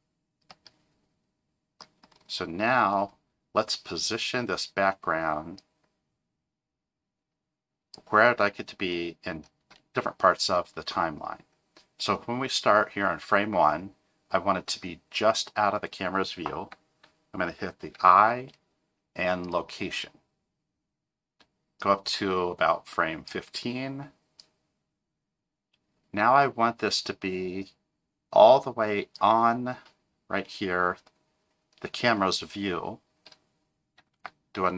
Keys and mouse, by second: 0.6-1.9 middle drag, 5.7-8.0 drag, 17.9 i, 21.8-23.3 drag, 24.5-29.4 drag, 34.2 i.